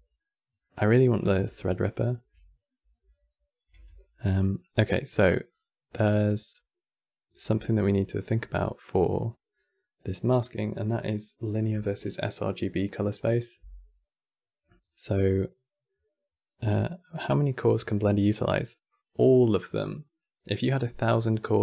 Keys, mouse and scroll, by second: 3.4 n, 5.2 click, 5.7 click, 7.2 n, 8.0-11.6 middle drag.